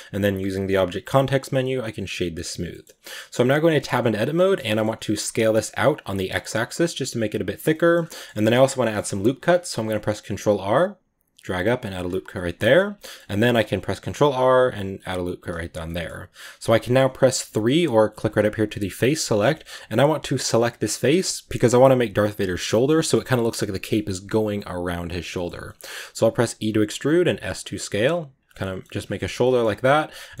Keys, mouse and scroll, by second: 1.9 w, 2.5 scroll down 1, 2.6-3.6 middle drag, 3.6 Tab, 3.8-4.5 middle drag, 4.5 scroll up 1, 4.6 middle click, 5.3 s, 7.6 middle drag, 7.8 scroll down 1, 7.9-9.5 middle drag, 9.5 ctrl+r, 12.2-13.7 middle drag, 13.7 ctrl+r, 15.7-17.3 middle drag, 17.3 3, 18.1-19.3 drag, 19.3 scroll up 1, 19.4-20.3 shift+middle drag, 20.3 right click, 20.5-26.2 middle drag, 26.2 e, 27.1 s, 28.5 middle click, 28.9 g, 29.3-30.4 middle drag.